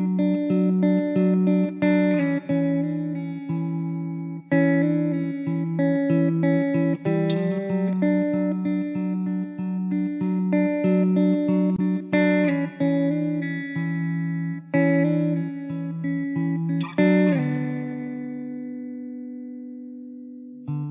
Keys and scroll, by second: 1.3 x, 2.4 Tab, 3.2 h, 4.2 Tab, 4.9 x, 6.7 2, 7.6 f, 9.4 alt+h, 10.3 Tab, 18.3 s, 19.1 s.